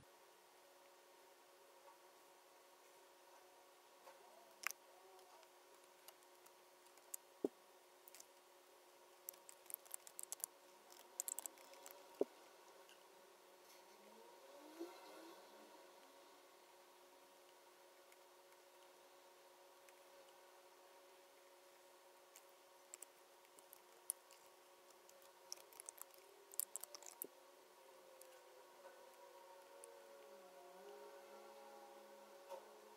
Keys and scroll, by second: 6.9 super+F9, 8.2 BackSpace, 24.9 BackSpace.